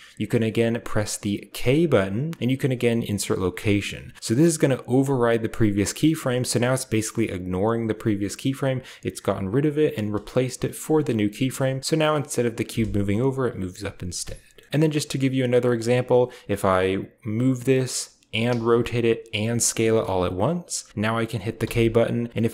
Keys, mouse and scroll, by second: 1.4 k, 3.4 click, 6.0-6.8 drag, 9.3 click, 10.1 space, 11.5-13.2 drag, 11.8-12.6 middle drag, 13.9 space, 14.5 middle click, 14.7 ctrl+b, 14.7-15.7 drag, 17.2 g, 17.8 click, 18.3-21.5 typing, 18.8 click, 19.6 click, 20.1-20.9 drag.